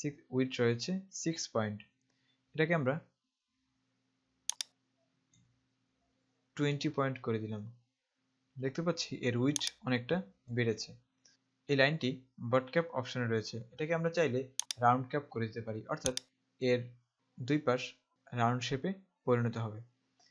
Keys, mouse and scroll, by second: 4.6 click, 6.6 KP_2, 7.5 KP_Enter, 9.7 click, 14.8 click, 16.2 click.